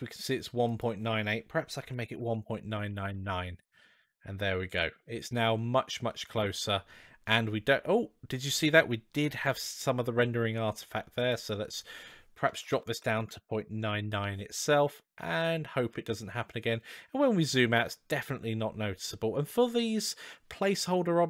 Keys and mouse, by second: 0.5-3.6 drag, 2.1 KP_9, 3.9 click, 4.3-5.2 middle drag, 5.9-6.4 middle drag, 11.0-14.3 drag, 12.7 BackSpace, 14.7-15.8 middle drag, 17.0-17.5 middle drag.